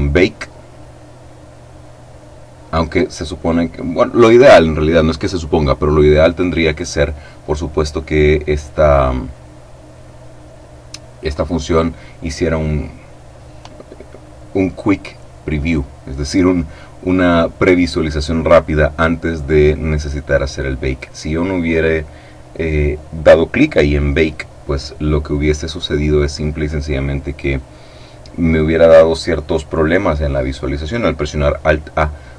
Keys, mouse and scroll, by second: 0.6 click.